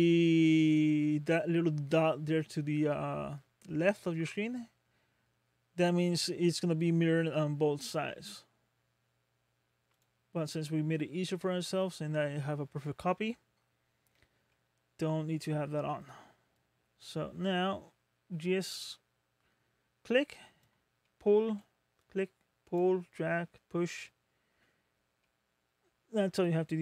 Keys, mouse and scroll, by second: 9.9 click, 10.6 scroll up 2, 11.1 middle click, 11.3-11.9 scroll down 4, 13.6-14.1 scroll up 3, 14.5 middle click, 15.5 scroll down 1, 16.5 click, 21.0 middle click, 22.0 click, 23.1 middle click, 24.1-24.8 scroll down 1, 24.8 scroll down 2, 25.2 middle click, 26.5 click.